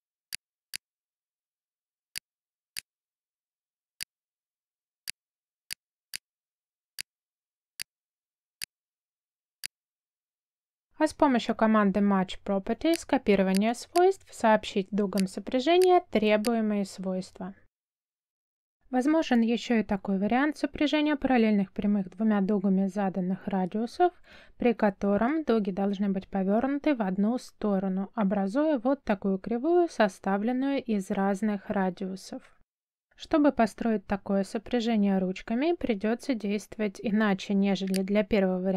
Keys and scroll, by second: 1.7 space, 3.6 space, 7.3 space, 8.9 space, 10.9 m, 12.1 space, 16.1 space.